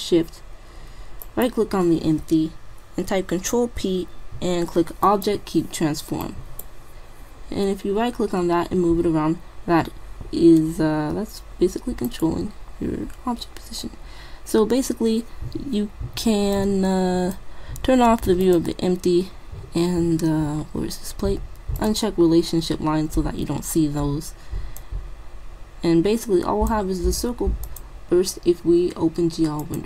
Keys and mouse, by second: 1.2-2.9 right drag, 3.6 ctrl+p, 6.3 middle click, 7.0-8.0 right drag, 13.5-16.6 middle drag, 16.6-18.4 drag, 18.4-20.3 drag, 20.5 middle click, 21.8-23.7 drag, 24.8-26.5 drag, 27.7-29.5 drag, 29.5 middle click.